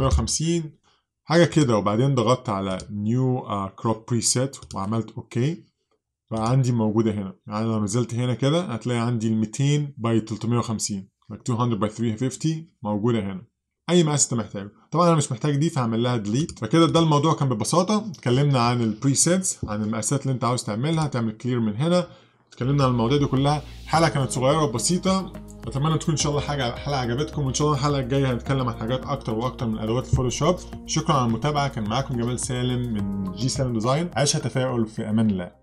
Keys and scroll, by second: 0.0-0.7 typing.